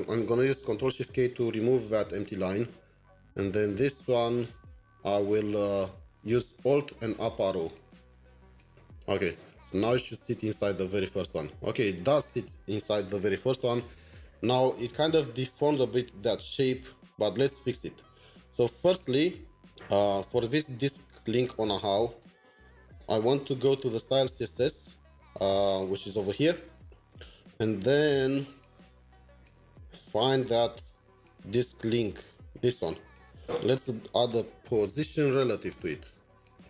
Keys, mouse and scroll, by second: 1.0 ctrl+shift+k, 2.2 Down, 2.2 Down, 4.3 Delete, 4.5 Delete, 6.8 alt+Up, 9.6 ctrl+s, 10.2 alt+Tab, 21.7 alt+Tab, 28.8 alt+Tab, 29.3-29.9 scroll down 3, 29.9-30.5 scroll down 1, 30.5-32.6 scroll down 2, 33.4-34.2 scroll down 6, 34.2 Return, 34.5-35.7 typing.